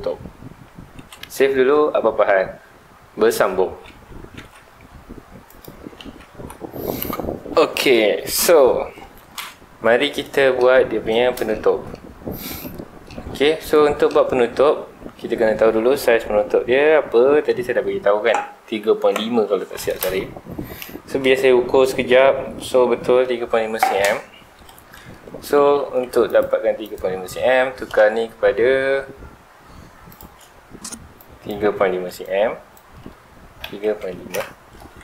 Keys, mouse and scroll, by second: 1.0 ctrl+s, 10.3-10.7 middle drag, 10.7-11.5 scroll up 3, 11.5-12.0 shift+middle drag, 12.0 scroll up 1, 12.6-16.8 middle drag, 24.9-25.2 middle drag, 25.2-25.7 scroll down 2, 25.7 scroll up 1, 26.3 click, 26.8 click, 30.1 click, 31.2 click, 32.0 Escape, 32.2-34.3 drag, 34.3 KP_Enter.